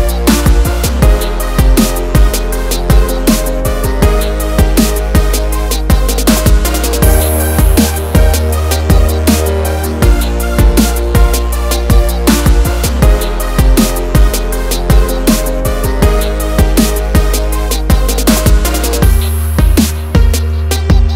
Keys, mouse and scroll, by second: 0.2 scroll down 1, 0.5-0.9 scroll up 1, 0.9 click, 1.8 ctrl+o, 3.1 scroll down 1, 6.5 scroll down 1, 8.4 click, 9.8 click, 11.6 click, 13.3 F4, 14.9 F9, 17.0 click, 19.0 ctrl+o, 20.3 scroll down 1.